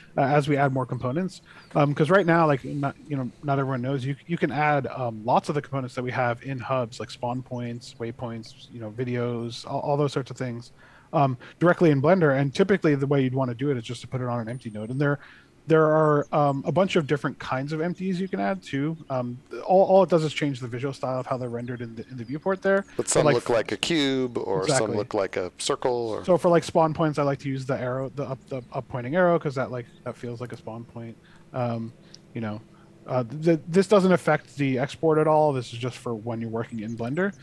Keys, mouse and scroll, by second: 16.4 middle click, 20.0 shift+a, 23.0 click, 23.9 middle click, 25.2 ctrl+z, 25.6 middle click, 26.5 shift+a, 30.4 click, 31.1 middle click, 31.8 g, 37.0 right click.